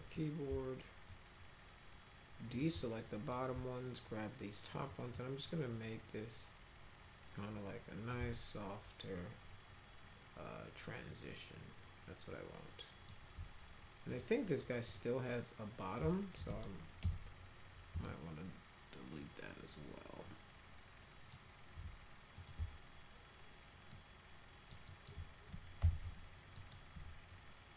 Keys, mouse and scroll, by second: 1.1-2.5 alt+drag, 2.8-3.3 alt+middle drag, 5.1-8.1 drag, 8.3-13.1 alt+middle drag, 14.1 click, 14.8 click, 16.1 alt+middle click, 16.4 middle click, 17.0 F3, 18.0-21.3 alt+middle drag, 22.3 ctrl+click, 23.9 alt+middle click, 24.8 alt+middle click, 25.8 f, 26.0 z, 26.5 middle click, 27.3-27.7 alt+drag.